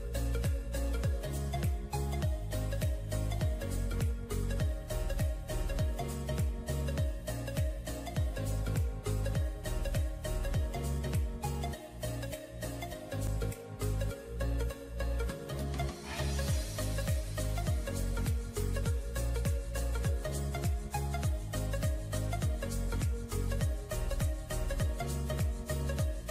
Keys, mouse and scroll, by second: 0.6-1.9 scroll down 1, 6.6 ctrl+j, 12.2 [, 12.4 [, 12.5 [, 12.6 [, 14.1 ctrl+click, 14.8 ctrl+e, 17.6-18.9 typing, 24.0 double click.